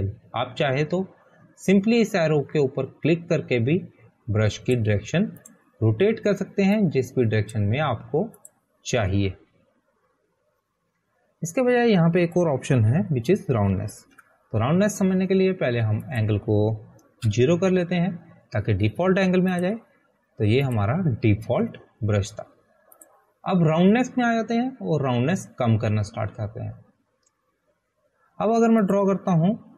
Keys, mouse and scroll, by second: 1.1 click, 14.8 click, 15.3 ctrl+a, 16.5 Delete, 18.5 Delete, 18.6 click, 19.7 0, 20.2 Return, 21.9 click, 25.4 click, 26.3 scroll down 1.